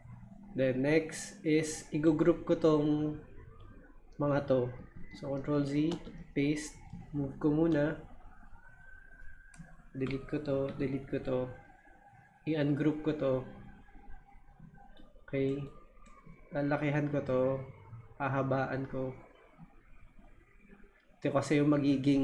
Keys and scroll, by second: 4.9 super+z, 5.9 super+v, 10.0 Delete.